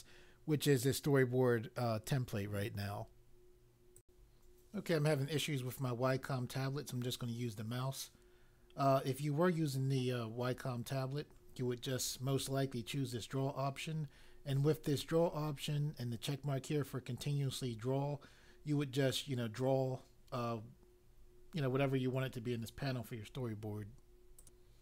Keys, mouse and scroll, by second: 4.0 click, 24.4 click.